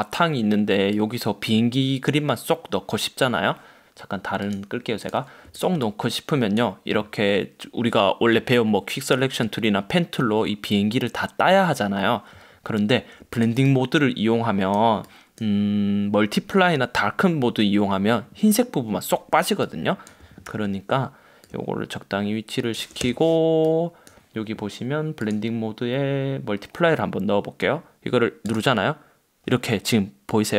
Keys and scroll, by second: 20.6 super+t, 23.1 Return.